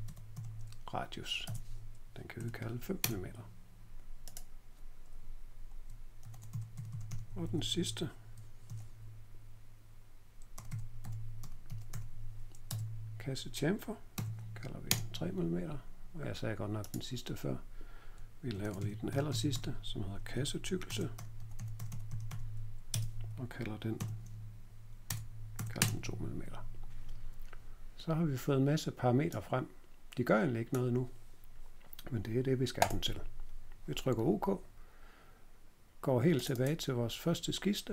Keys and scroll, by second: 0.0-0.8 typing, 1.4 Tab, 2.3 5, 3.0 Return, 5.9-9.1 typing, 10.2-12.4 typing, 12.6 Tab, 14.1 3, 14.8 Return, 18.2-22.7 typing, 22.8 Tab, 23.9 3, 25.0-25.7 typing.